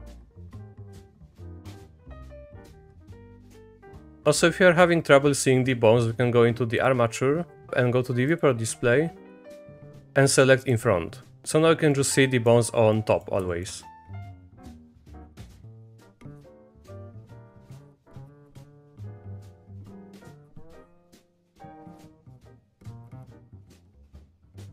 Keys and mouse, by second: 0.3 middle click, 0.5 click, 1.2 click, 1.6 middle click, 2.6 click, 3.0 middle click, 3.3 click, 3.7 middle click, 6.8 click, 8.3 click, 10.6 click, 11.3 click, 12.0 click, 13.0 click, 13.5 shift+click, 14.1 e, 14.5 click, 15.6 shift+click, 16.2 click, 16.4 middle click, 16.8 click, 17.0 click, 17.2 middle click, 17.4 middle click, 17.6 shift+click, 18.1 click, 18.5 click, 18.8 middle click, 19.0 e, 19.5 ctrl+z, 19.5 click, 19.7 e, 20.3 click, 20.6 click, 20.8 e, 21.3 click, 22.0 shift+click, 22.6 middle click, 22.7 e, 23.2 click, 23.3 e, 23.8 click, 24.3 e.